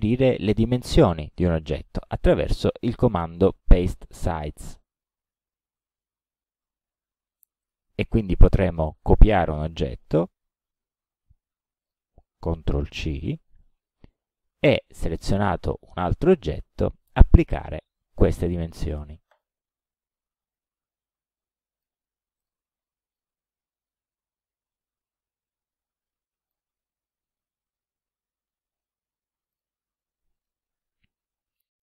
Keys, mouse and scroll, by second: 4.2 click, 7.7 click, 9.0 click, 11.9 click, 12.9 ctrl+c, 14.7 click, 17.0 click, 19.4 click, 20.6-22.1 drag, 22.4 click, 23.2-26.8 drag, 29.6 click, 30.0 click, 30.1 middle click.